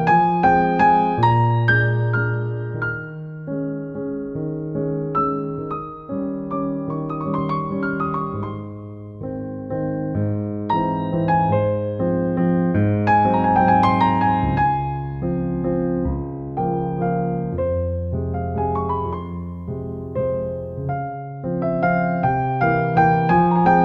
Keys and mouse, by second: 0.0 Tab, 0.3 click, 0.6 click, 1.0 alt+middle click, 1.6 alt+middle click, 1.8 alt+middle click, 2.1 ctrl+z, 2.2 ctrl+z, 2.9 ctrl+z, 3.3 ctrl+z, 3.4 ctrl+z, 3.5 ctrl+z, 3.9 click, 4.2 click, 4.4 alt+middle click, 4.7 right click, 5.2 click, 5.3 click, 7.7 middle click, 8.1 click, 9.2 click, 9.6 click, 9.9 shift+click, 10.2 click, 10.9 click, 12.1 alt+middle click, 12.4 right click, 12.7 click, 13.1 click, 13.4 click, 13.8 ctrl+z, 13.9 ctrl+z, 14.2 click, 14.7 click, 14.9 click, 15.1 right click, 15.3 click, 16.2 click, 17.4 click, 17.7 click, 18.6 click, 19.5 click, 19.6 alt+middle click, 20.5 click, 20.6 Tab, 20.8 alt+middle click, 21.1 Tab, 21.2 Tab, 21.4 middle click, 21.9 Tab, 22.0 click, 22.3 alt+middle click, 22.7 ctrl+s.